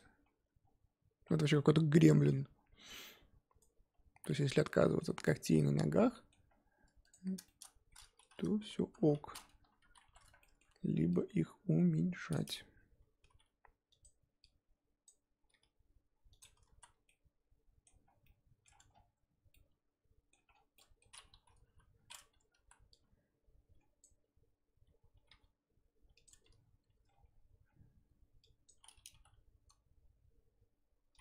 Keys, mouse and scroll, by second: 3.9-4.3 scroll down 2, 4.3-6.4 middle drag, 6.4 scroll up 2, 7.1 click, 7.5 shift+middle click, 7.7-8.7 scroll up 2, 8.8 KP_3, 9.2-9.6 scroll up 2, 9.6 Tab, 9.9 z, 10.0 1, 10.4-12.3 shift+middle drag, 12.3 click, 13.2 g, 15.0 click, 15.5 g, 16.8 z, 17.1-18.1 middle drag, 18.1 scroll down 1, 18.2 middle click, 18.8 Tab, 18.9-19.5 scroll down 1, 19.5 middle click, 20.5 scroll down 3, 20.7 middle click, 21.1 scroll up 1, 21.6 KP_3, 21.9-22.3 scroll up 4, 22.3 Tab, 22.6 z, 24.0 click, 25.2 g, 26.4 Tab, 26.9 Tab, 27.1-27.6 scroll down 5, 27.6-28.4 scroll up 5, 28.6 click, 29.1 g.